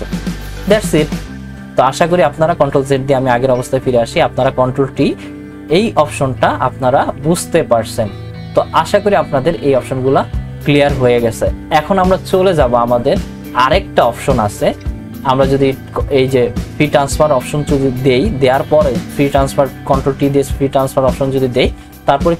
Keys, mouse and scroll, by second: 2.7 ctrl+z, 5.0 ctrl+t.